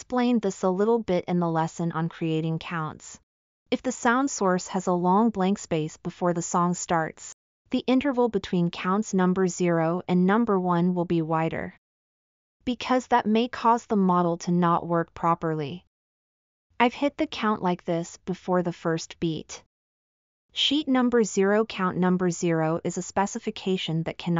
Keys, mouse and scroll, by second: 22.8-24.0 drag.